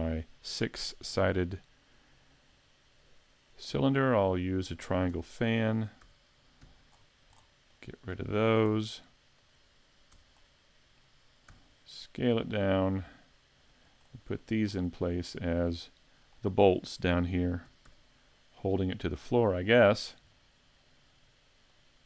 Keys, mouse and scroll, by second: 1.3 click, 4.0 middle click, 5.1 Tab, 5.4 middle click, 6.0 a, 6.7 c, 8.2 right click, 8.7 x, 10.2 Tab, 10.4 middle click, 11.6 s, 13.8 click, 14.0-15.5 scroll up 6, 14.4 shift+middle click, 15.3 shift+middle click, 15.7 middle click, 17.7 s, 20.4 middle click, 21.7 click.